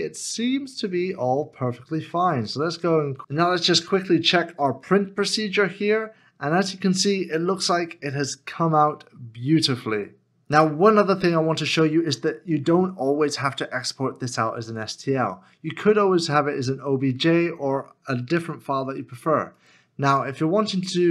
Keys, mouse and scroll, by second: 2.7 scroll down 1.